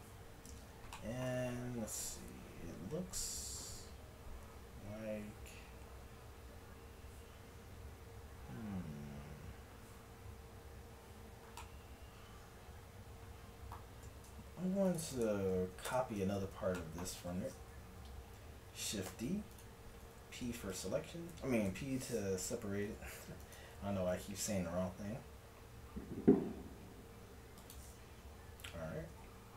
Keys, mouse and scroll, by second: 5.7-7.7 middle drag, 11.6-14.9 middle drag, 14.9-16.7 drag, 15.9 ctrl+KP_Add, 19.1 shift+d, 20.1 p, 21.7 KP_1, 22.9 Tab, 24.1 g, 29.1 Tab.